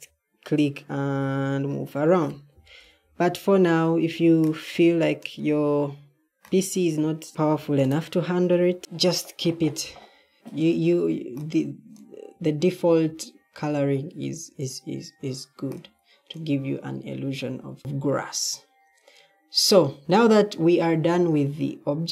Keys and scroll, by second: 2.7 ctrl+z, 7.3 d, 8.5 d, 12.7 Escape, 17.5 Left, 20.8 d.